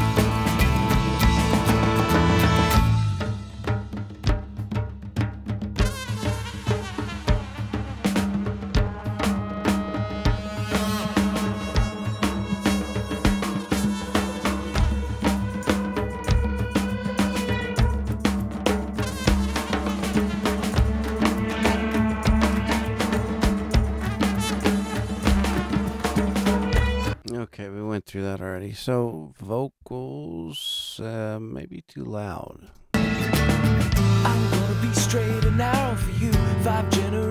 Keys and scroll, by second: 9.4 super+=, 26.8 space, 32.6 space, 36.8 super+=.